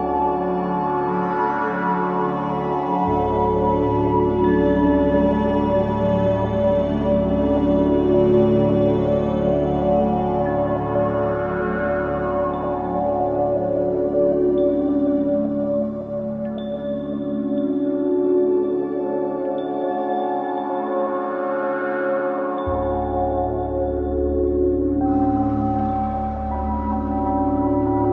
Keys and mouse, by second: 2.5-4.2 ctrl+alt+drag, 7.0 middle click, 7.9 click, 9.0 click, 9.3 click, 11.5 click, 13.9 right click, 15.0 click, 16.2 ctrl+z, 17.5 right click, 18.7 click, 19.9 right click, 20.9 click, 21.5 click, 22.8 right click, 23.7 click, 26.4 click, 27.6 click, 27.9 click.